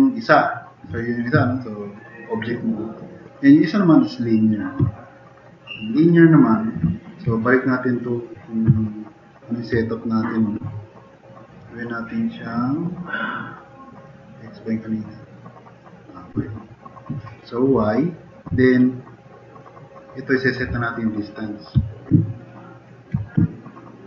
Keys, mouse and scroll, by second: 4.9 middle drag, 8.8-9.4 middle drag, 22.3-22.9 drag.